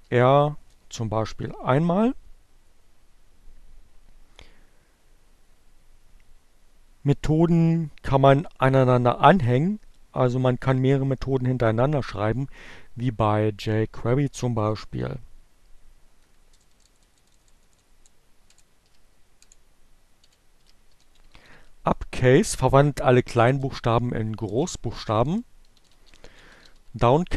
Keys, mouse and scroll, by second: 13.8 Up, 15.8 BackSpace, 18.9-21.2 typing, 21.7 Return, 23.4 Up, 23.5-26.2 typing, 26.7 Return, 27.3 Up.